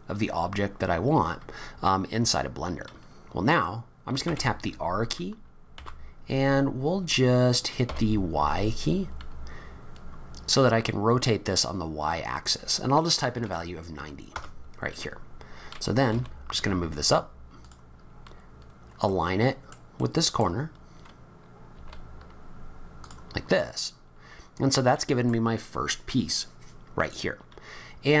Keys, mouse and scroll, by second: 0.5-0.9 scroll down 2, 4.2 r, 16.1 g, 17.6 g, 18.1 scroll up 2, 19.0 middle click, 20.0 middle click, 21.7 g, 23.4 scroll down 2, 23.6 middle click, 27.7-28.2 scroll down 4.